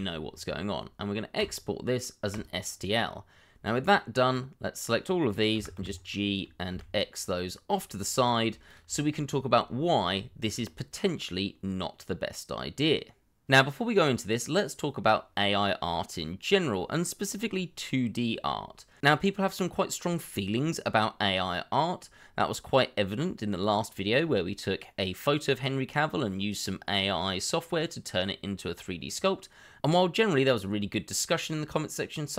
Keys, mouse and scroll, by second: 2.9-5.5 scroll down 1, 5.5 g, 5.7 y, 6.7 x, 8.2 shift+middle click.